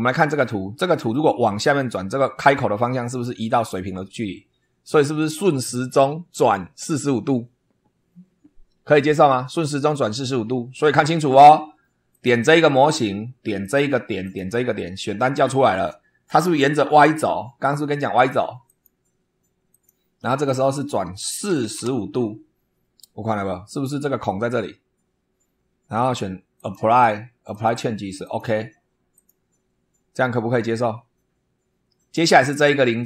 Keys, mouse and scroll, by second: 12.1 click, 13.5 click, 14.2 click, 18.6 click, 19.7 click, 20.5 click, 21.4 4, 21.7 5, 26.5 click, 27.5 click, 28.2 click, 29.1 click.